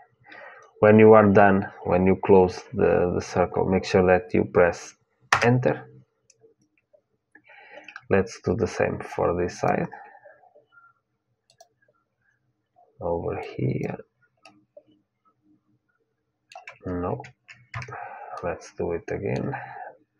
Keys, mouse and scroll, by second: 9.3-11.3 drag, 14.1-16.2 middle drag, 18.1-20.0 middle drag, 20.0-20.1 drag.